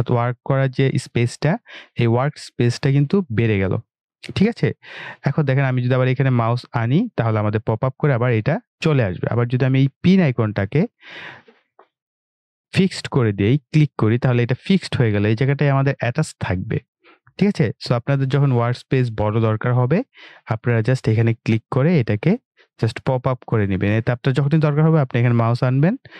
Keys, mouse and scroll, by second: 1.6-2.3 scroll down 1, 2.3-2.9 scroll up 1, 11.4 click, 21.4 click, 25.8 typing.